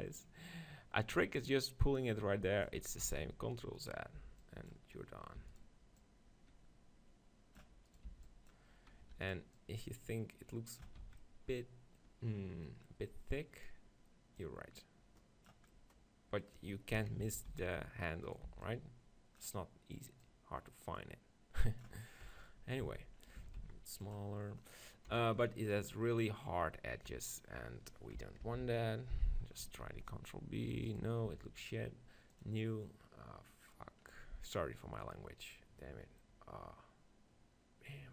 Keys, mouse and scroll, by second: 3.0 ctrl+z, 3.8-5.7 right drag, 4.2 b, 5.4 e, 6.0-7.9 drag, 7.9-11.0 right drag, 8.1 b, 9.0 e, 9.6-11.3 drag, 10.9 Tab, 11.0 z, 11.5-14.4 middle drag, 14.4-16.2 drag, 15.7 middle click, 17.0 KP_7, 17.3 Tab, 17.5 z, 18.3-20.1 right drag, 18.5 b, 20.2-22.1 drag, 22.3 Tab, 22.5 middle click, 22.9 z, 23.4 s, 24.2-25.2 drag, 25.1 KP_7, 27.1 Tab, 28.6 ctrl+l, 29.9 ctrl+b, 31.3 Tab.